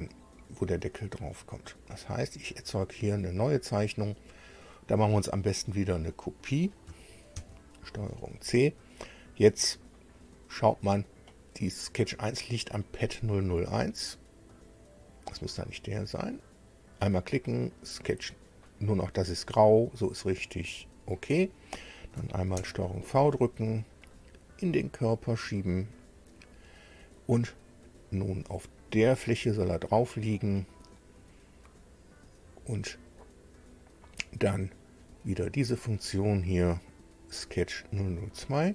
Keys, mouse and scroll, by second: 2.1 click, 4.7 click, 6.0 click, 7.3 ctrl+c, 15.6 click, 20.8 click, 22.5 ctrl+v, 23.9-25.9 drag, 26.3-26.7 scroll down 2, 28.8 click, 35.6 click, 36.9 click, 37.9 click.